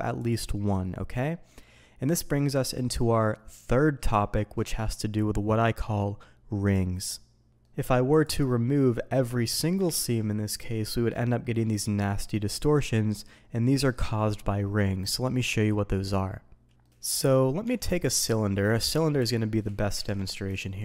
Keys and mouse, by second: 0.5 middle drag, 1.2 middle drag, 2.1-2.8 middle drag, 7.6 middle click, 8.1 click, 8.5-9.4 middle drag, 9.8 ctrl+e, 11.1-11.6 middle drag, 16.7 ctrl+z, 16.8-17.3 middle drag, 17.6 Tab, 18.8 middle drag, 19.2 Delete, 20.0 ctrl+z, 20.5 shift+a.